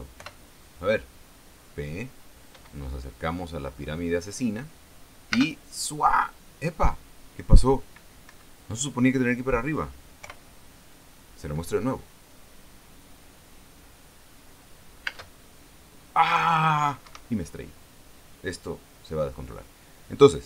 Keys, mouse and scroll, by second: 0.7 p, 5.8 space, 8.8 Escape, 10.7 p, 15.6 space, 17.6 Escape.